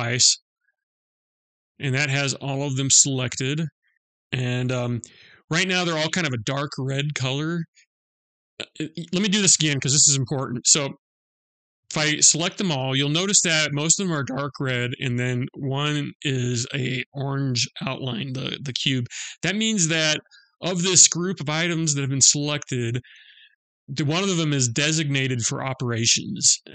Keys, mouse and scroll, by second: 0.4 middle click, 4.2 middle click, 10.5 click.